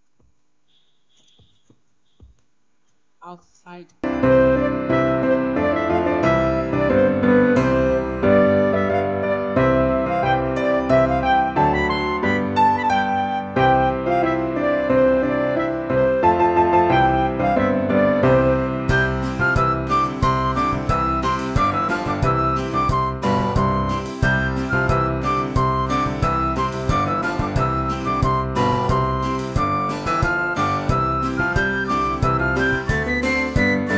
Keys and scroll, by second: 0.9-1.7 typing.